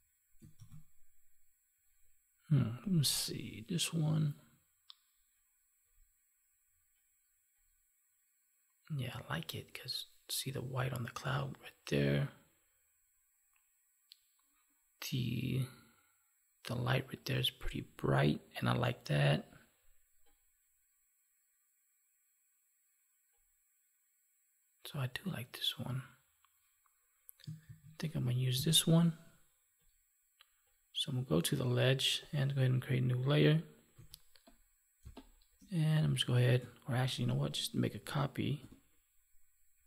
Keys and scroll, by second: 0.5 ctrl+s, 27.6 ctrl+s, 34.9 space, 36.8 ctrl+z, 38.5 ctrl+j.